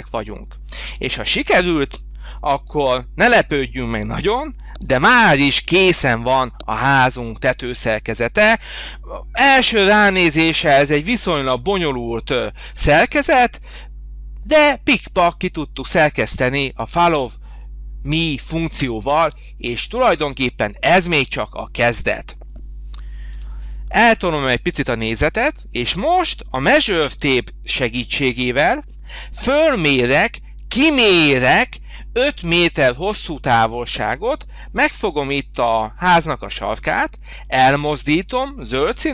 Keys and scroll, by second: 23.3 h.